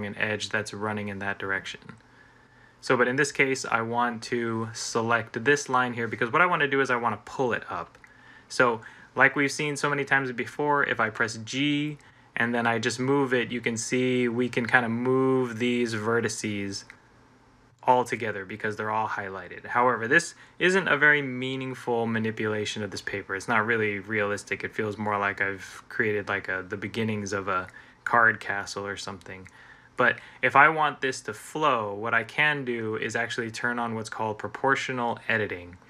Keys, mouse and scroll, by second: 10.9 g.